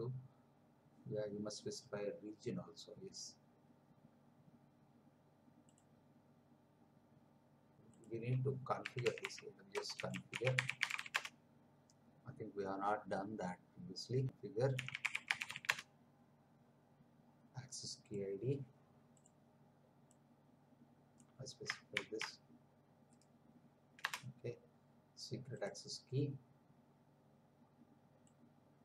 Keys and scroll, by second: 8.6-11.5 typing, 14.0-15.9 typing, 21.9 ctrl+c, 24.0 Return.